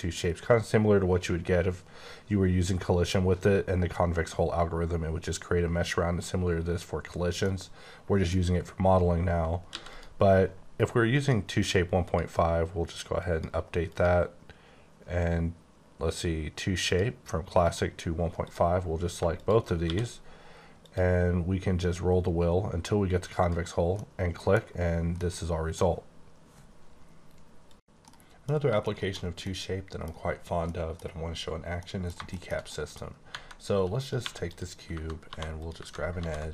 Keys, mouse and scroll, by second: 7.4 middle click, 9.7 x, 9.9 click, 11.1 click, 12.0 click, 13.2 click, 13.9 click, 16.8 click, 17.6 click, 18.4 click, 19.8 q, 20.8 click, 21.6-22.2 scroll down 3, 22.2-23.4 scroll up 1, 23.4 click, 24.0 middle click, 25.2 middle click, 28.8 middle click, 29.0 scroll down 1, 29.4 middle click, 30.6 middle click, 31.7 middle click, 32.2 middle click, 32.7 middle click, 33.3 Left, 34.2 3, 34.4 click, 35.2 2, 35.5 click, 36.1 ctrl+b.